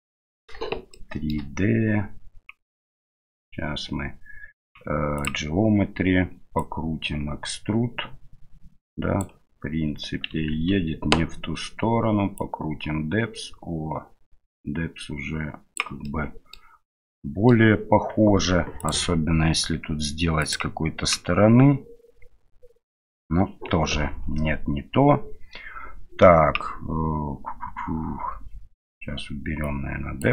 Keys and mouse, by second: 0.9-1.3 shift+middle drag, 5.2 click, 6.6-9.2 drag, 12.4-15.8 drag, 16.0-16.5 middle drag, 17.1 middle click, 18.9-20.6 drag, 29.7 click.